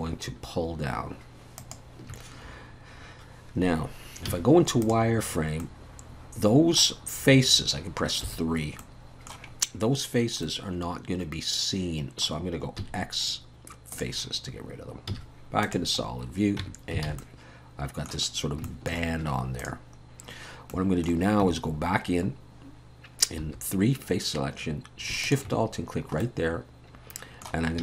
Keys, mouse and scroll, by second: 4.3 z, 5.6 middle click, 8.3 3, 8.8 middle click, 9.5 scroll up 2, 10.2 scroll down 1, 10.4 middle click, 12.8 x, 15.1 z, 16.1-16.6 scroll down 2, 16.6 Tab, 17.1 alt+a, 17.2 middle click, 18.3 scroll up 1, 18.6 shift+middle click, 19.6 click, 20.7 middle click, 21.4 Tab, 21.8-22.8 scroll up 1, 23.4 3, 25.2 alt+shift+click, 25.9-26.2 scroll down 1, 26.2 middle click, 27.7 scroll up 2.